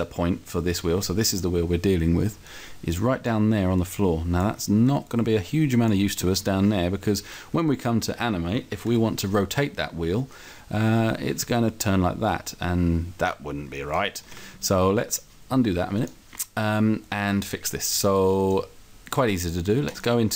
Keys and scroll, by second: 8.9 r, 14.3 ctrl+z.